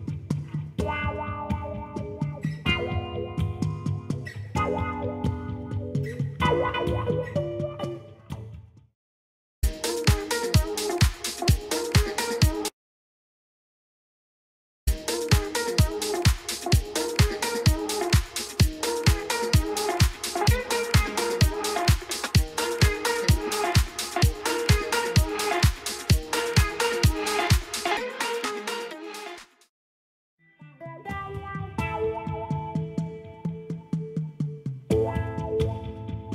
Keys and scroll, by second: 1.4 i.